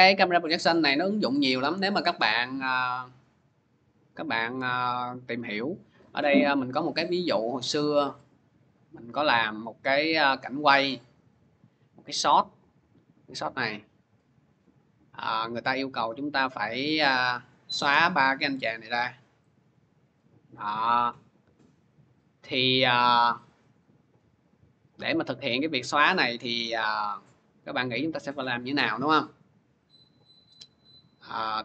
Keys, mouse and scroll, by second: 5.4 click, 5.8 click, 6.0 click, 7.6 click, 9.2 click, 9.4 click, 10.4 click, 10.6 click, 12.8 middle click, 12.8 middle click, 14.4 click, 15.6 click, 18.9-20.6 drag.